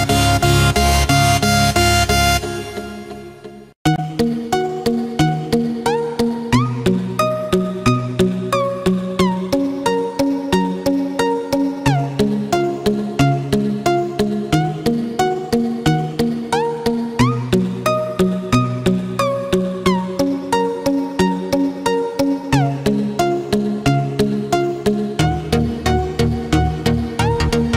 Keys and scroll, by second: 26.4 ctrl+0, 27.3 ctrl+=.